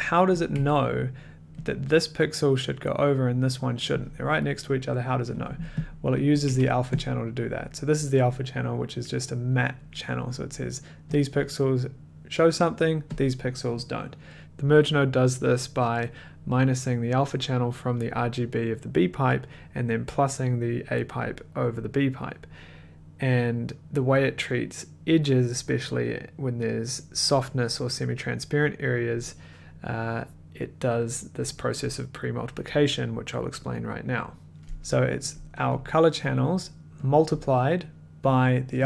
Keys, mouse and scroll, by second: 0.5 click, 0.5 1, 1.8 click, 2.2 middle click, 4.2 middle click, 6.0 click, 6.1 middle click, 6.5 a, 7.0 click, 7.0 middle click, 11.4 click, 13.2 click, 34.5 click, 35.3 click, 35.8 click, 36.4 click, 37.1 click, 37.4 click, 38.5 click.